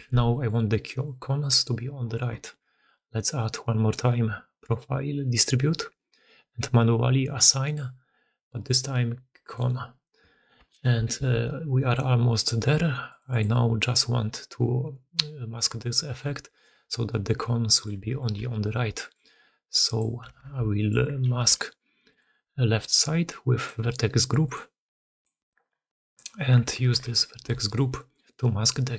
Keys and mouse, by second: 0.0-28.9 typing, 0.2 drag, 3.2-5.4 drag, 7.4 click, 9.5 click, 10.5 Return, 11.1 alt+a, 11.7 middle click, 13.0 middle click, 17.5 middle click, 19.3-20.2 drag, 20.2 Tab, 25.1 middle click, 25.6 Tab, 26.9 alt+h, 27.3 alt+a.